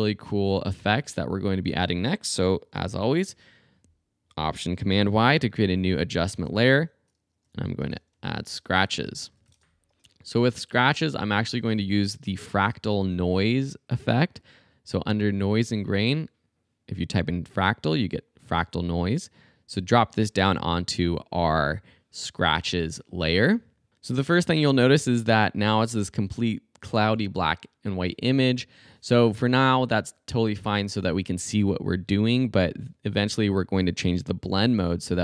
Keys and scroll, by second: 2.9 alt+super+y, 6.4 Return, 7.5-10.0 typing, 11.8-13.5 typing.